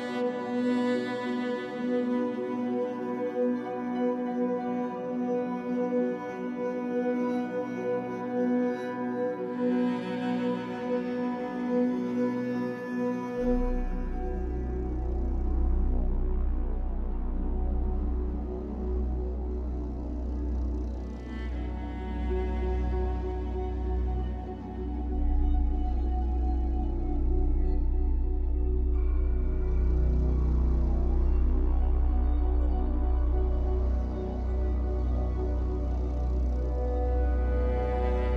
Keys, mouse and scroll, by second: 0.0 e, 2.1 click, 2.3 middle click, 3.2 shift+click, 4.0 middle click, 4.4 click, 6.4-8.4 middle drag, 8.1 e, 8.9 click, 11.3-13.5 middle drag, 11.9 z, 13.3 Tab, 13.5 right click, 14.4-19.0 middle drag, 15.1-15.4 scroll down 2, 15.6-15.9 scroll up 2, 15.9 Tab, 16.8 ctrl+r, 19.0-24.9 drag, 19.4 ctrl+r, 20.2 right click, 21.5 ctrl+z, 24.9-33.2 middle drag, 25.3 Tab, 25.6-25.9 scroll down 2, 27.6 scroll down 2, 28.3 scroll up 2, 29.7 z, 30.8 KP_1, 31.4 Tab, 31.7-32.8 scroll up 2, 32.9 scroll up 2, 33.2 click, 33.7-38.3 middle drag, 34.6 KP_1, 35.7 b.